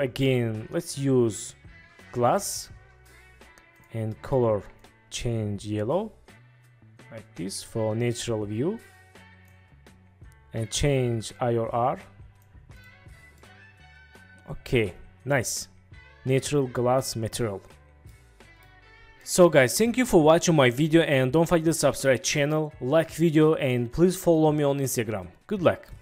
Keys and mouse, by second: 3.8 click, 10.4-12.5 drag, 12.9-13.5 drag, 13.5-16.2 middle drag, 18.2 middle click, 19.4-26.0 middle drag.